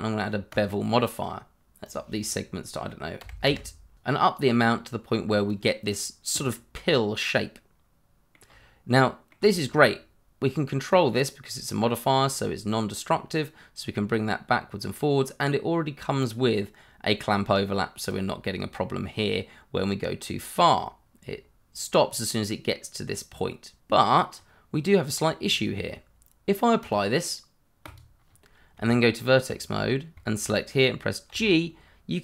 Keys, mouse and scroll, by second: 3.2 8, 3.4 Return, 3.9 click, 5.8-6.2 scroll down 1, 6.4 middle click, 8.5 scroll up 1, 8.9 middle click, 10.9 click, 16.8-18.0 scroll down 1, 18.0 click, 18.9-20.2 scroll up 1, 20.2 click, 24.8-25.5 scroll up 1, 25.5 scroll down 1, 26.8 click, 28.7 Tab, 29.7 scroll up 1, 30.5 click, 30.7 shift+middle click, 31.5 g.